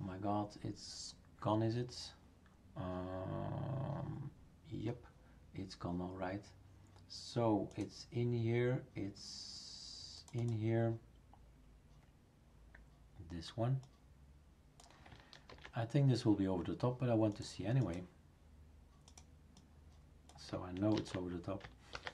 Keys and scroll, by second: 15.5 ctrl+c, 20.9 ctrl+v, 21.9 ctrl+s.